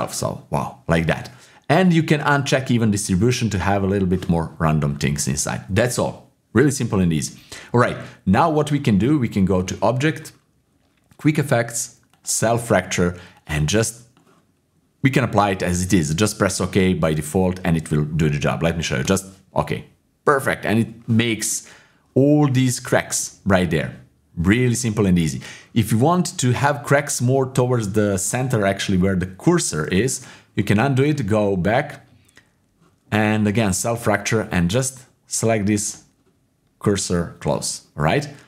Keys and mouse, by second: 3.5 click, 9.5-22.3 drag, 28.7 click, 29.8 ctrl+z, 31.1-38.4 drag.